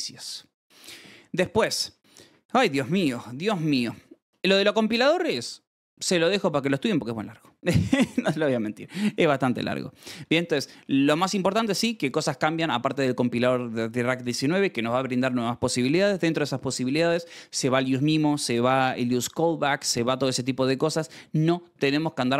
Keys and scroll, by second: 4.6 Escape, 4.9 j, 8.8 BackSpace, 8.9 Escape, 9.1 k, 9.6 s, 10.2 shift+v, 10.4 Escape, 11.5 shift+v, 11.8 Escape.